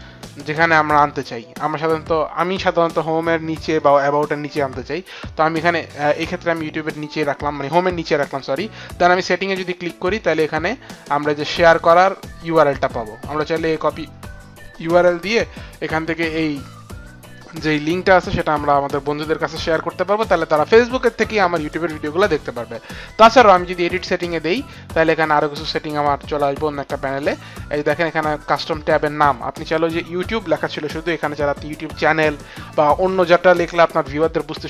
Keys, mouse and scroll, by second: 3.7 click, 9.0 click, 13.7 click, 23.9 click.